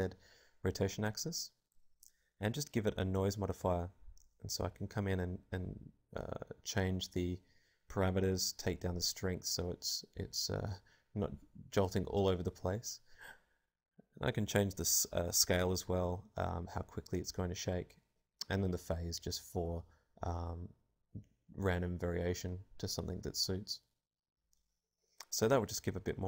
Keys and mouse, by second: 5.3-7.4 drag, 9.0-10.2 drag, 11.1-12.3 drag, 11.7 alt+a, 13.2 alt+a, 13.4-15.2 drag, 17.1-19.0 drag, 20.7-22.3 drag, 22.1 alt+a.